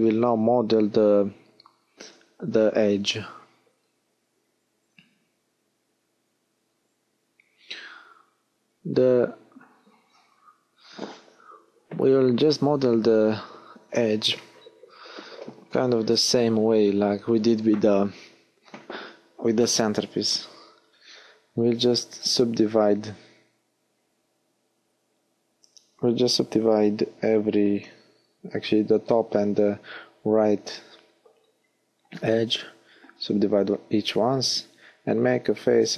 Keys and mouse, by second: 3.9 w, 10.3 l, 11.2 h, 13.9 w, 17.1-18.5 middle drag, 23.9 f, 27.1 f, 29.5 f.